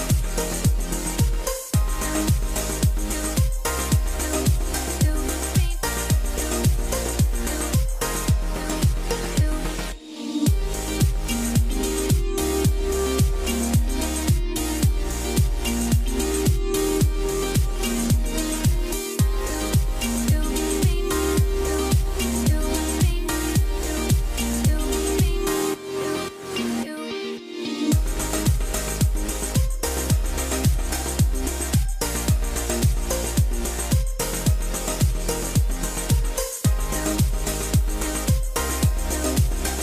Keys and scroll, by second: 0.2 Return, 13.3 F12, 22.5 F12, 24.0 F12, 33.0 F12.